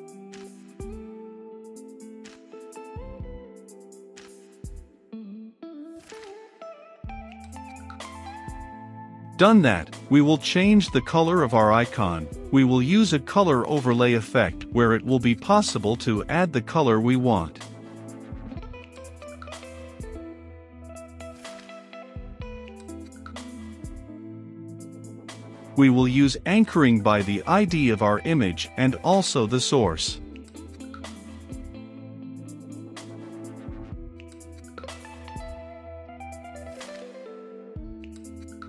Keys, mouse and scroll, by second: 5.5 ctrl+v, 5.9 ctrl+z, 7.0 Return, 7.7 shift+~, 8.1 ctrl+v, 9.2-17.9 drag, 17.9 Return, 18.9 typing, 19.7 Down, 20.3 Return, 20.6 shift+], 20.8 Return, 21.4-23.2 drag, 23.4 ctrl+x, 23.6 click, 24.3 ctrl+z, 24.8 click, 25.3 a, 25.4 n, 25.6 c, 26.4 Return, 26.7-27.8 typing, 27.2 Return, 28.1 Return, 28.9 i, 28.9 c, 29.0 o, 29.1 n, 29.7 Down, 29.9 Return, 30.9 click, 32.8 Return, 33.1 middle click, 33.2 click, 33.5 s, 33.6 o, 33.7 u, 34.1 Return, 35.3 i, 35.4 o, 36.3 Down, 36.7 Up, 37.0 Down, 37.2 Return, 38.0-38.6 drag.